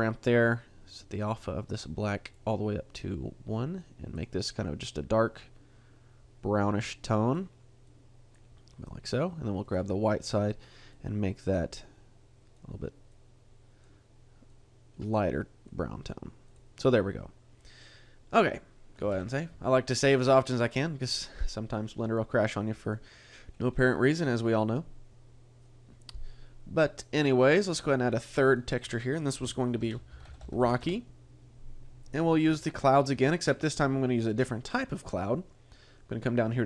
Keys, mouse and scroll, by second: 0.3 click, 9.7 click, 10.2 click, 16.5 click, 19.1 ctrl+s, 22.8 click, 23.5-24.5 scroll up 2, 27.8 click, 30.0 click, 33.7-35.4 scroll down 5.